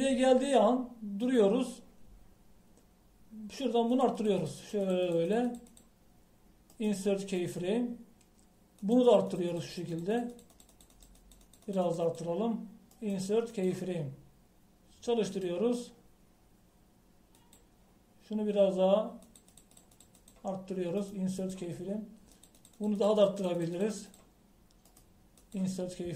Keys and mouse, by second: 2.4-7.8 drag, 7.8 middle click, 8.5-14.0 drag, 14.0 middle click, 15.0 click, 16.3-18.1 drag, 18.5-22.1 drag, 23.9-25.9 drag.